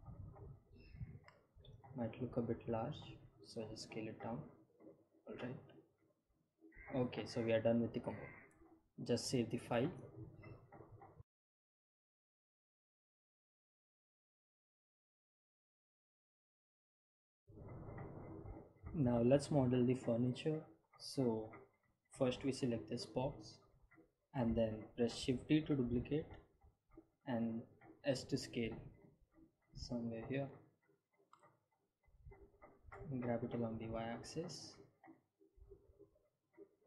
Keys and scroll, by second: 1.9 s, 8.2 ctrl+s, 27.0 shift+d, 29.9 s, 34.1 g, 34.4 y.